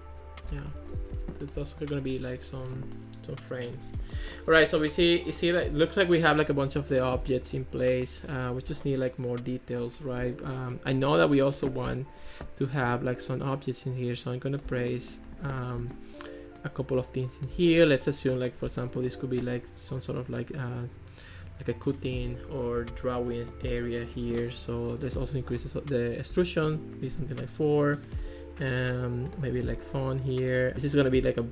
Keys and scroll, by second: 26.3 4, 26.7 Return, 30.7 super+z.